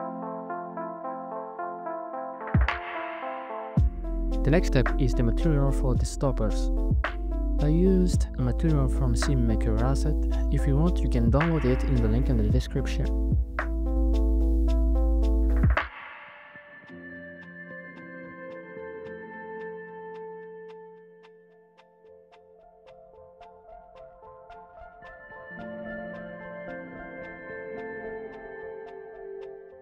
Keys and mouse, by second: 4.8 n, 8.1 click, 13.9 right click, 16.0 shift+a, 20.1 click, 23.2-24.1 drag, 28.4-29.5 drag.